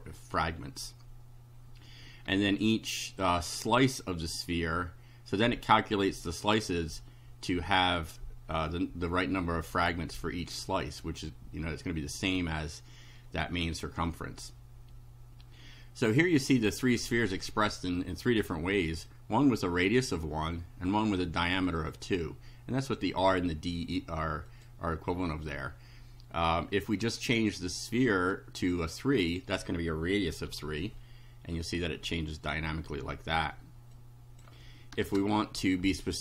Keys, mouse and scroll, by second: 0.1-0.8 scroll down 4, 16.4 click, 18.3 click, 19.2-20.3 drag, 20.9-22.1 drag, 24.5 click, 27.2 click, 28.7 3, 30.5 F5, 34.0 click, 35.0 BackSpace.